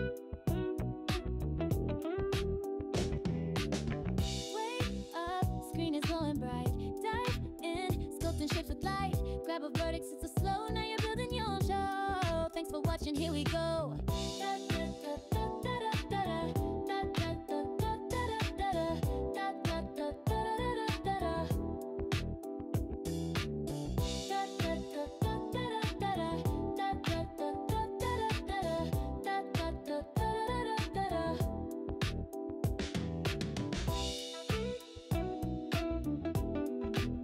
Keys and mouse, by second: 0.9-3.8 drag, 9.1 click, 10.7 click, 11.2 a, 11.9 shift+click, 12.8 shift+click, 14.9 click, 15.9 x, 17.5 a, 18.1-19.8 drag, 23.8 click, 27.1-28.6 drag, 31.5-33.4 drag, 36.4 Tab.